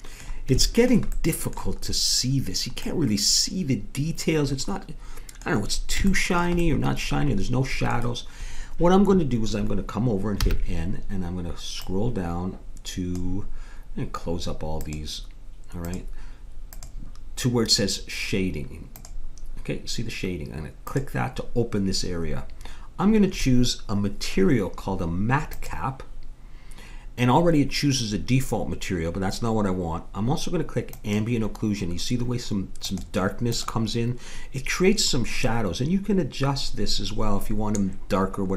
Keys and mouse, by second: 3.1-4.6 middle drag, 6.7 middle click, 10.4 n, 11.8-13.6 drag, 14.8-20.7 drag, 20.9-27.3 drag, 30.9-32.8 drag.